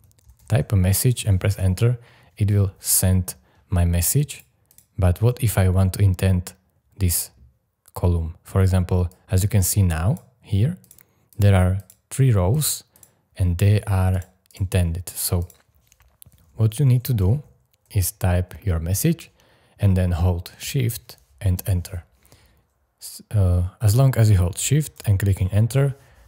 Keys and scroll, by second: 0.0-1.0 typing, 1.5 Return, 16.5-17.8 typing, 21.5 shift+Return, 24.5 shift+Return, 25.7 shift+Return.